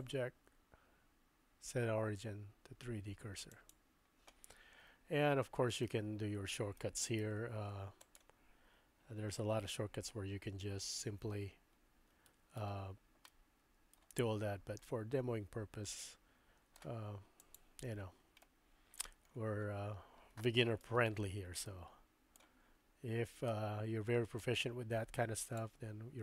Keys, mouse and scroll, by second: 0.0-3.7 drag, 3.7 middle click, 5.9-6.9 middle drag, 7.3 s, 11.0 z, 13.3 middle click, 14.3 middle click, 14.9-16.8 drag, 17.5 click, 18.4 shift+click, 18.5 shift+middle click, 20.9 Tab, 21.7 middle click, 23.5 middle click, 25.5 click.